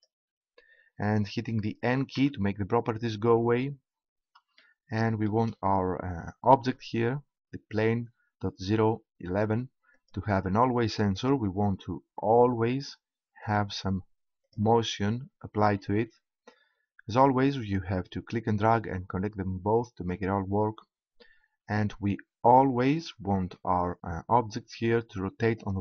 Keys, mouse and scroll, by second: 0.7-2.2 drag, 2.2 n, 5.5-6.7 middle drag, 9.9-11.7 drag, 13.4-15.1 drag, 17.5-19.2 drag, 25.6-25.8 drag.